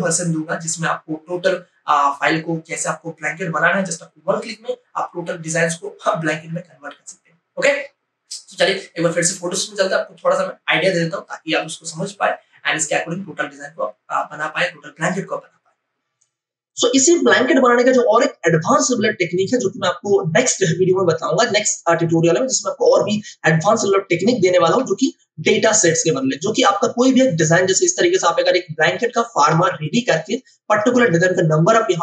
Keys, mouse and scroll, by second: 16.0 click, 25.1 ctrl+o, 26.5 click, 29.1 space, 29.6 ctrl+space, 29.8-32.0 drag.